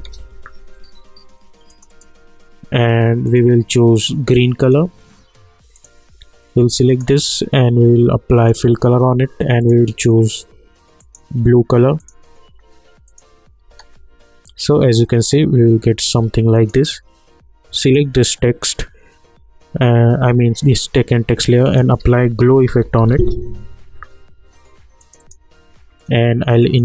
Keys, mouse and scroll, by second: 0.0-0.4 typing, 1.7 click, 13.7 space, 16.0 space, 16.5 click, 21.6 click, 22.0 ctrl+a, 22.3-23.6 typing, 25.0-26.8 drag.